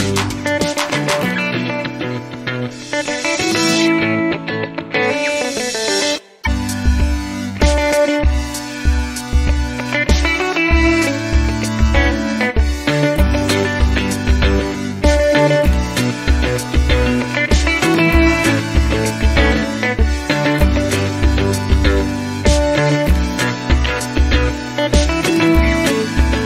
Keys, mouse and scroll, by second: 6.9 click, 8.4 BackSpace, 12.7 click, 13.8 scroll down 1, 16.0 click, 16.7 click, 21.5 0, 22.5 scroll down 1, 23.3 scroll up 2, 26.1 click.